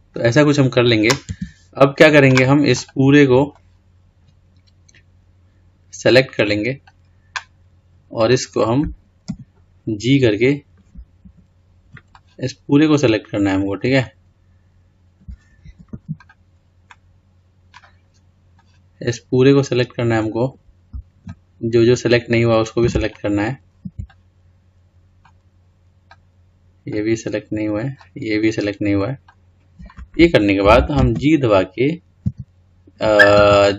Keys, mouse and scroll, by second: 1.5 Tab, 2.9 click, 3.7 click, 12.3 click, 15.9 Escape, 16.4 click, 18.7 click, 21.5 ctrl+click, 24.3 shift+click, 26.3 shift+click, 28.1 shift+click.